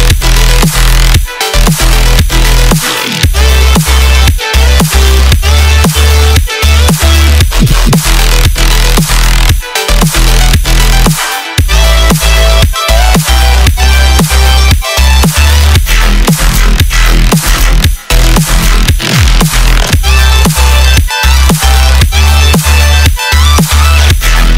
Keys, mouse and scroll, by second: 0.3 space, 1.3-4.3 drag, 8.3-9.9 scroll down 2, 9.9-10.3 scroll down 1, 10.3 click, 14.0-15.9 drag, 17.6 click, 18.2 click, 18.4-21.4 drag.